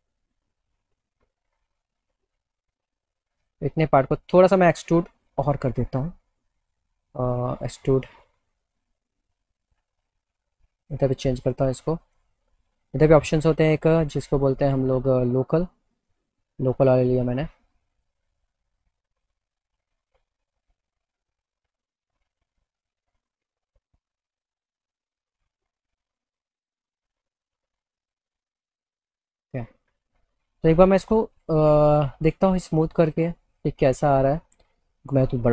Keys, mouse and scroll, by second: 6.0 click, 7.3 click, 10.9 click, 12.1 click, 13.0 click, 17.6-22.4 drag, 23.3 click, 27.6 right click, 29.2-30.3 alt+middle drag, 30.6 middle click, 30.8 middle click, 32.0 click, 34.0 click.